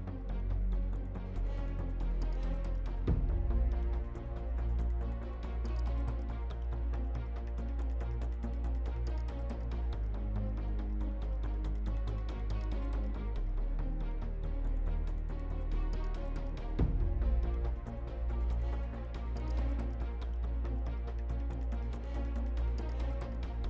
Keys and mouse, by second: 1.1 t.